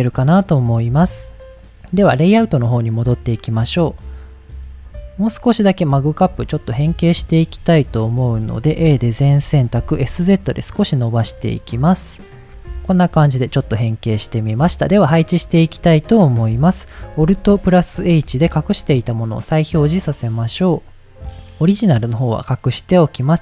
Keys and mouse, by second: 0.7 middle click, 1.3 click, 5.0 shift+middle drag, 5.9-6.3 shift+middle drag, 6.5 click, 6.7-7.3 middle drag, 7.5 Tab, 8.4 shift+middle click, 8.9 a, 9.5 s, 9.8 z, 11.0 click, 12.4 Tab, 12.4 g, 12.4 y, 12.9-13.3 middle drag, 13.4 middle click, 18.0 alt+h, 19.3-19.7 middle drag, 22.1 click, 22.9 click.